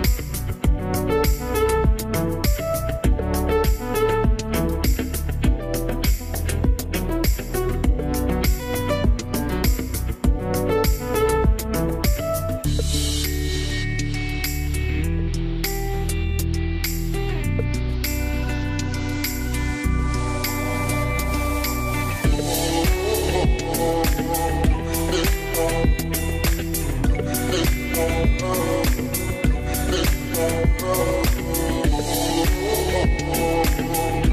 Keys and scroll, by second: 19.2 2, 19.5 Return, 28.8 m, 29.5 m.